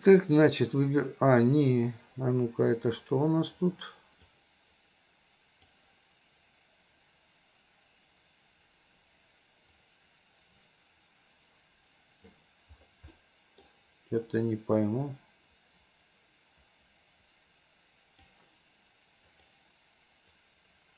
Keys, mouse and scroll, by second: 4.4-5.8 drag, 9.8-12.4 drag, 13.2-13.7 middle drag, 14.9-18.4 drag, 19.4-20.9 drag.